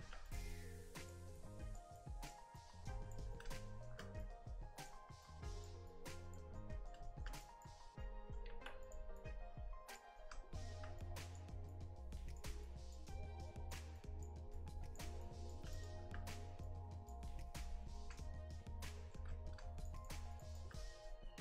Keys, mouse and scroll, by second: 0.0 f, 0.5 click, 1.4 click, 2.6 click, 3.4 middle click, 4.2 click, 5.3 click, 6.6 middle click, 7.1 shift+middle click, 7.5 click, 8.0 middle click, 8.5 f, 9.2 click, 10.2 middle click, 11.0 click, 11.7 click, 13.1 click, 15.3 click, 15.8-16.2 shift+click, 16.3-16.7 scroll down 1, 16.7 click, 17.3-18.0 scroll down 10, 18.0 middle click, 19.3-19.7 scroll up 6, 19.8 shift+click, 20.0 shift+click, 20.5 shift+click, 20.8 scroll up 2, 21.1 middle click.